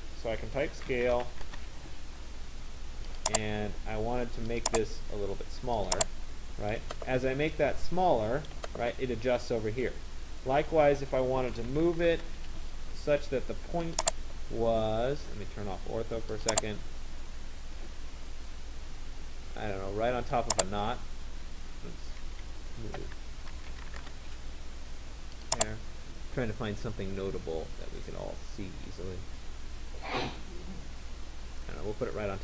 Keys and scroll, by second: 1.1 Return, 11.8 Return, 22.0 Escape, 24.2 Return.